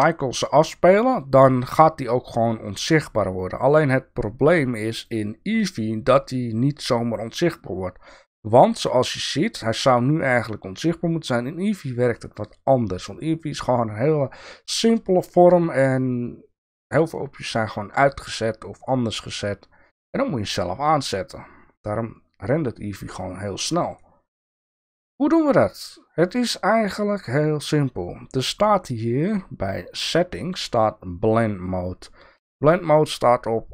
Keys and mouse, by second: 4.9 click.